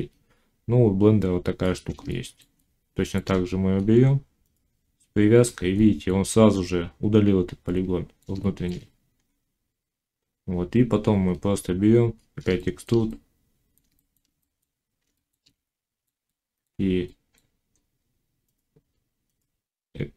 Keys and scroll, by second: 19.6 e.